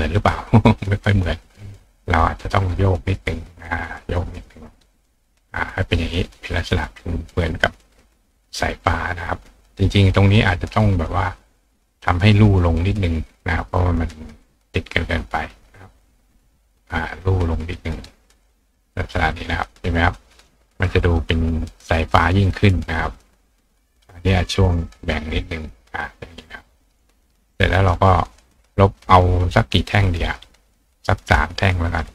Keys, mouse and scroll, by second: 0.7-2.1 right drag, 1.4-2.0 drag, 2.1-2.7 drag, 3.0-4.7 drag, 5.4 click, 6.6-7.8 drag, 7.2-8.1 right drag, 8.1 click, 13.8-15.3 drag, 15.3-16.1 right drag, 15.9 click, 17.8-18.4 drag, 19.0-19.6 drag, 21.1 click, 23.3-23.8 drag, 24.3 click, 24.3 right click, 24.9 click, 25.5 click, 26.3 click, 27.6 click, 30.1 click, 31.5 click.